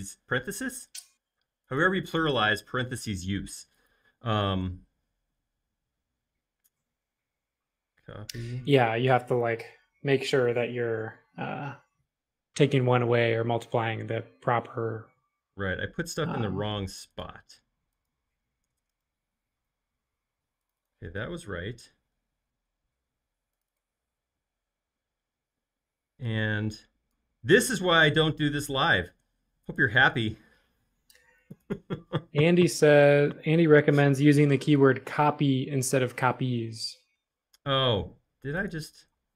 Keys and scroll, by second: 13.2 shift+4, 14.0 Return, 18.8 BackSpace, 18.9 Return, 19.6 Return, 21.7 super+z, 22.1 super+z.